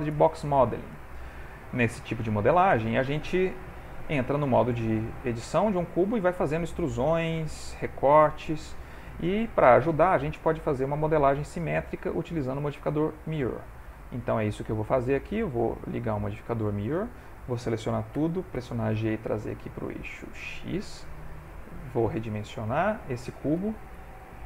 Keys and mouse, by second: 1.8 ctrl+middle click, 2.1 shift+middle click, 2.8 Tab, 4.2 3, 4.4 click, 5.1 click, 5.6 g, 7.2 ctrl+r, 12.6 click, 13.4 click, 18.3 a, 18.3 g, 20.4 ctrl+middle click, 21.1 s, 23.6 g.